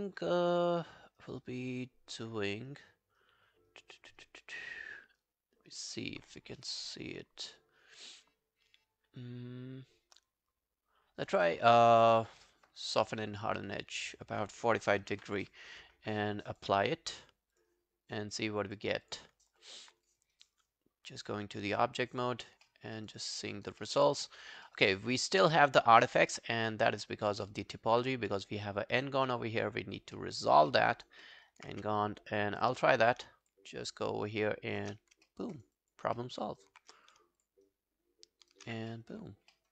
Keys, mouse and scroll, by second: 14.8-15.7 typing, 18.7 double click, 19.1 double click, 19.4 alt+scroll down 1, 19.6 alt+click, 20.4 right click, 22.4 scroll up 1, 22.7 alt+middle click, 23.0 alt+right click, 23.2 alt+click, 23.5 alt+right click, 23.8 alt+middle click, 24.1 alt+right click, 24.3 alt+click, 24.7 alt+middle click, 24.9 alt+right click, 25.1 alt+click, 26.0 alt+middle click, 26.2 alt+right click, 26.9 alt+right click, 27.2 alt+click, 27.5 alt+middle click, 27.7 alt+right click, 28.4 alt+scroll down 2, 28.7 alt+click, 29.3 alt+middle click, 29.4 alt+scroll down 1, 29.5 alt+right click, 29.7 alt+click, 30.2 alt+middle click, 30.4 alt+right click, 30.7 alt+middle click, 30.9 alt+right click, 31.3 alt+middle click, 31.5 alt+right click, 31.8 q, 32.0 right click, 33.5 shift+click, 33.8 shift+right click, 35.3 alt+middle click, 35.6 alt+right click, 35.8 alt+click, 36.2 alt+middle click, 36.4 alt+right click, 37.4 shift+click, 37.7 shift+right click, 38.9 alt+middle click, 39.3 alt+scroll down 1, 39.5 alt+middle click.